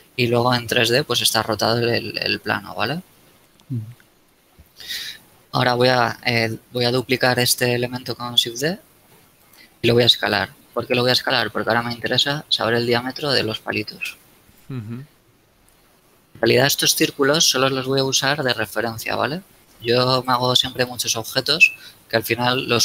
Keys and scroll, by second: 4.6 KP_1, 5.7 z, 8.3 shift+d, 10.5 s, 15.5 a.